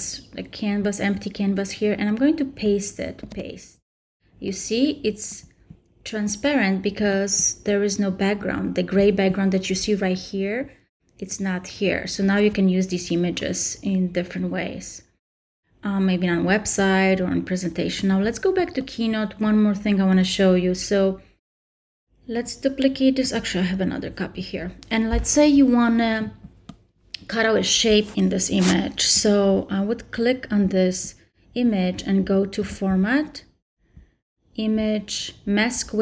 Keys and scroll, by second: 3.2 super+v.